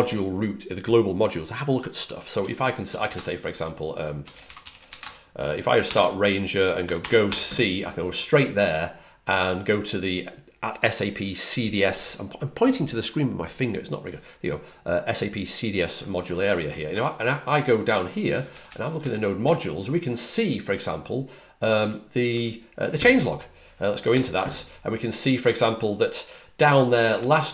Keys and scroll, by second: 2.8-7.2 typing, 16.8 typing, 18.0-19.8 typing, 21.7-22.2 typing, 27.1-27.5 typing.